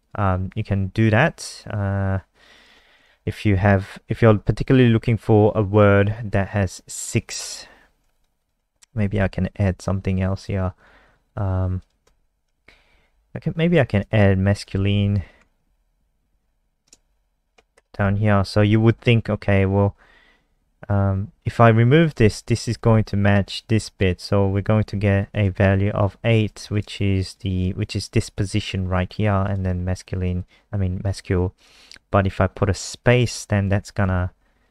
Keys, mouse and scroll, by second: 0.0 click, 2.5 click, 3.1 shift+Home, 3.4 shift+Up, 8.1 click, 8.3 click, 9.7 click, 11.0 click, 11.7 click, 12.5 ctrl+shift+Right, 12.7 shift+Left, 14.3 Left, 14.7 ctrl+shift+Right, 15.4 ctrl+c, 15.6 Left, 15.7 Left, 16.0 Right, 16.4 ctrl+v, 17.0 Left, 17.1 Left, 17.3 Left, 17.4 Left, 17.7 BackSpace, 18.0 Down, 18.8 ctrl+s, 21.9 click, 22.4 BackSpace, 22.7 ctrl+s, 23.7 click, 24.8 F5, 25.7 alt+click, 26.6 click, 33.6 ctrl+s, 34.0 F5.